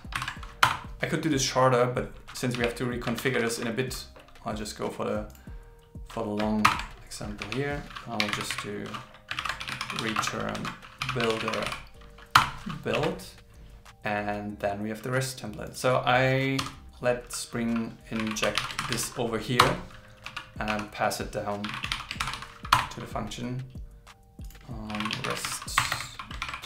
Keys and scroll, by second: 0.2 alt+8, 3.2 super+Right, 6.7 alt+Return, 9.4 super+Left, 10.6 super+Right, 14.0 super+s, 18.8 shift+t, 22.2 shift+t, 25.5 shift+t, 26.4 shift+t.